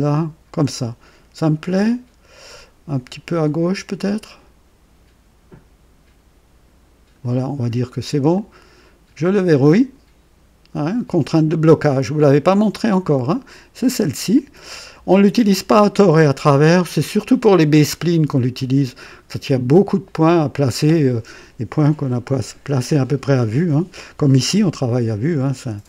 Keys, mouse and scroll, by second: 3.9-7.3 drag, 8.3 click, 11.3 click.